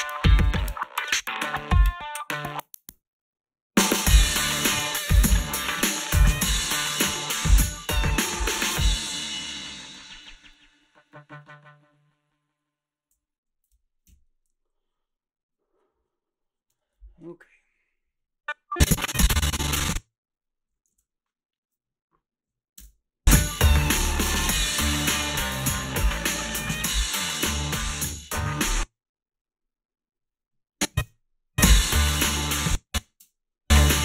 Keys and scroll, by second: 13.1 space, 14.1 Home, 20.9 ctrl+s, 22.8 space, 28.5 space, 31.0 space, 32.4 space, 33.2 space.